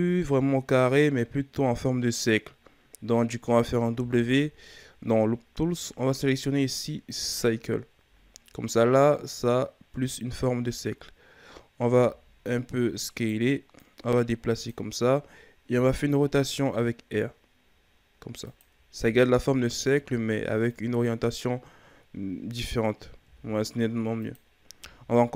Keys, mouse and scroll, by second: 3.9 w, 8.5-10.2 scroll down 2, 10.2-10.7 scroll down 3, 10.7-11.9 scroll up 4, 11.9 s, 13.8-15.7 drag, 15.7 r, 19.0 s, 20.6-23.2 drag, 23.2 s.